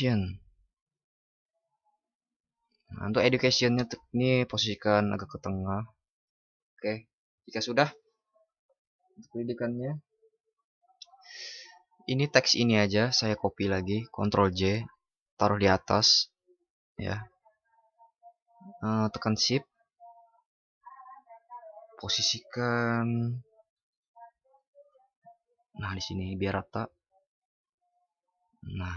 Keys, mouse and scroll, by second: 14.3 ctrl+shift+i.